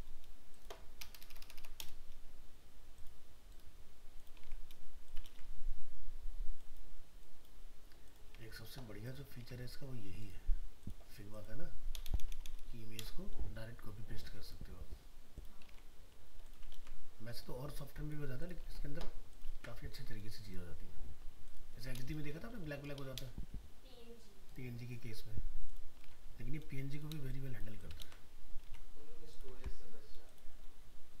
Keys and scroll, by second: 4.4 alt+Tab, 5.3 ctrl+v, 8.4 alt+Tab, 15.7 alt+Tab, 16.7 ctrl+v, 18.7 alt+Tab, 19.5 ctrl+Tab, 26.1 alt+Tab.